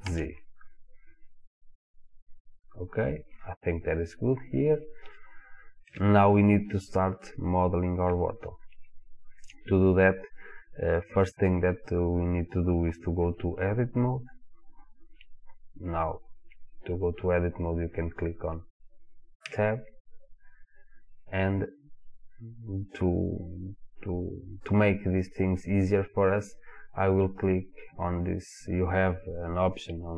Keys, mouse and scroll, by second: 2.5 click, 4.0-5.2 scroll up 1, 5.2-9.6 shift+middle drag, 9.6 click, 11.3 click, 19.5 Tab.